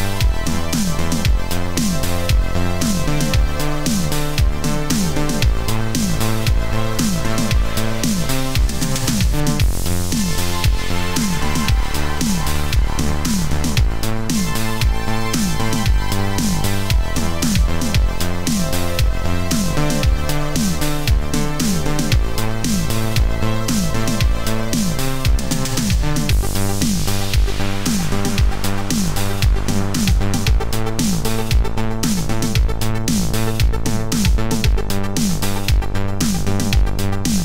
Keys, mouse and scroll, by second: 0.5-7.0 typing, 0.9 click, 1.1 click, 2.2 click, 2.8 click, 3.2 click, 3.4 click, 3.7 click, 4.0 ctrl+z, 4.0 click, 4.1 click, 4.6 click, 4.7 click, 4.8 click, 5.1 click, 5.7 alt+click, 5.9 Return, 6.0 click, 6.9 alt+click, 7.0 click, 7.1 ctrl+z, 7.3 shift+click, 7.7 ctrl+shift+click, 8.1 ctrl+shift+click, 8.4 Escape, 8.4 click, 8.6 Return, 8.6 b, 9.0 middle click, 9.1 click, 9.2 ctrl+x, 9.3 click, 9.6 click, 9.9-12.1 typing, 10.1 click, 11.1 ctrl+shift+click, 11.2 ctrl+click, 11.6 click.